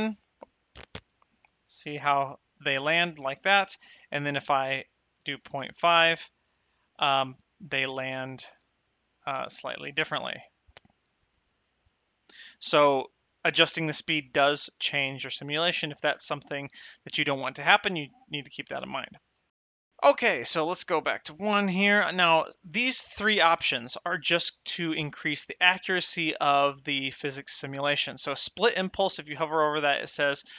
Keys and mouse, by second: 3.0 space, 3.3 shift+Left, 4.5 click, 5.1 KP_Decimal, 5.4 KP_5, 8.8 click, 9.3 space, 13.5 space, 20.3 click, 21.0 KP_1.